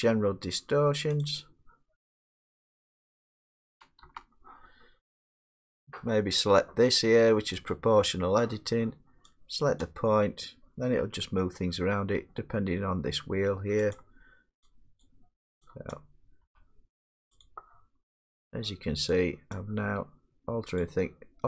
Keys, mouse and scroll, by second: 1.2 click, 4.0 space, 7.7 click, 9.8 click, 11.0 g, 11.8 middle click, 11.8-12.7 scroll, 13.9 click, 15.1 click, 15.9 middle click, 15.9 click, 16.5 g, 17.4 click, 18.0 middle click, 18.0 middle click, 19.5 click, 19.9 g, 20.8 click.